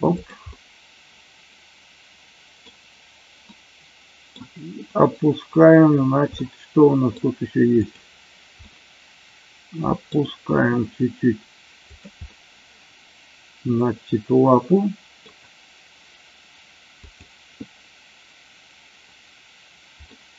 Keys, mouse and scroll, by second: 0.0 click, 0.4 scroll up 1, 0.5-2.7 middle drag, 3.4 middle click, 6.3 scroll up 1, 6.5 middle click, 7.7 click, 8.6-10.1 middle drag, 10.6 r, 11.8 click, 12.3-15.2 middle drag, 17.1 click, 20.1 middle click.